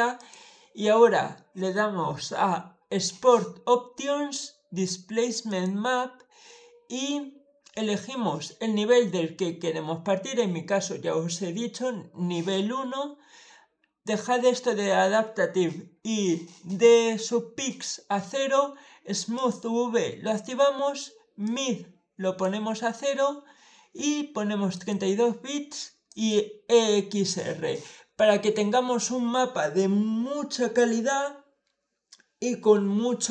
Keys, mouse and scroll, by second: 0.0 click, 5.3 click, 19.2 click, 21.3 click, 24.6 click, 25.9 click.